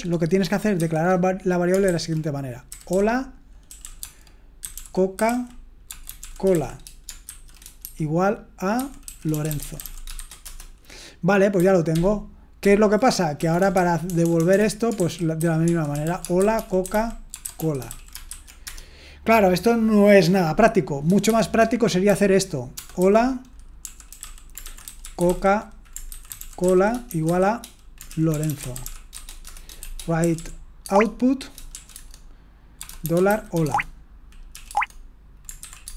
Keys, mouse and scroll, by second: 0.8 typing, 1.9-10.6 typing, 11.9 ctrl+p, 12.6 ctrl+p, 13.6 BackSpace, 13.9 BackSpace, 14.9-18.8 typing, 21.3-35.9 typing, 31.9 Tab.